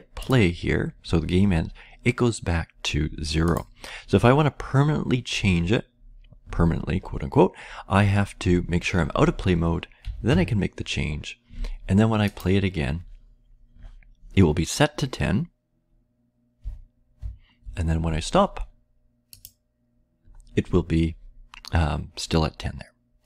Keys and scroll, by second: 9.9 typing, 16.6 Left, 17.1 Left.